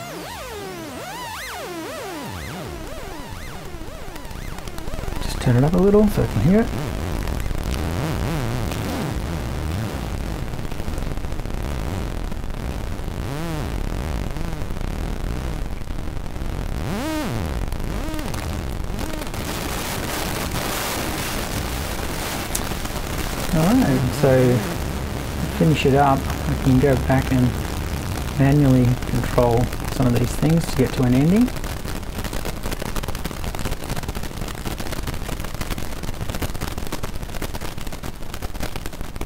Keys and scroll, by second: 24.8 BackSpace, 26.2 BackSpace.